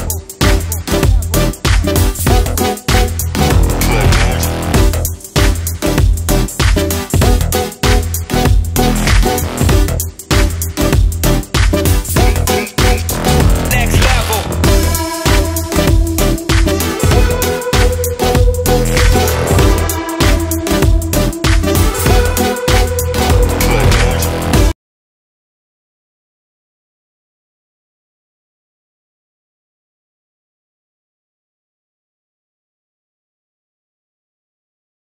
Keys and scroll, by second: 13.6 ctrl+space, 14.1 ctrl+space.